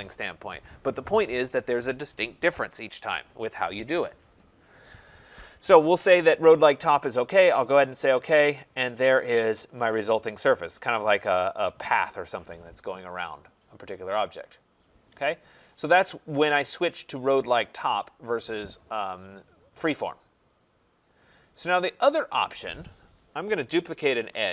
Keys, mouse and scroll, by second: 7.9 click, 8.5 middle click, 10.3 right click, 11.1 right click, 15.3 middle click, 15.5 middle click, 16.3-16.6 scroll, 23.4-24.5 typing.